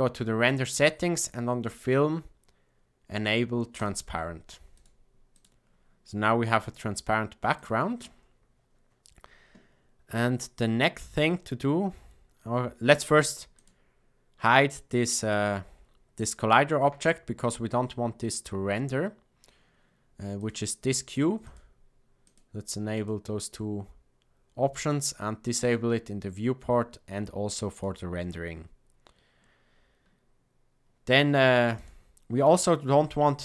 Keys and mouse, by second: 1.1 click, 4.7 click, 5.3 click, 7.5 click, 13.5 click, 21.4-24.6 drag, 25.5 click, 27.6 click, 31.7 click.